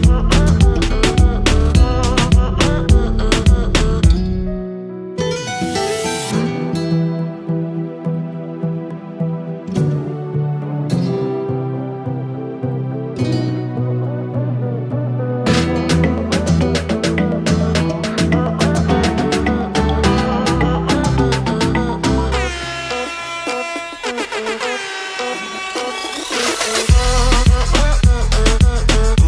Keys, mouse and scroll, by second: 1.0 click, 2.1 click, 3.0 click, 4.2-5.9 typing, 6.6 click, 9.4 click, 11.9 click, 15.2 click, 15.3 click, 18.1 click, 20.1 click, 22.7 click, 23.9 click, 26.2 click.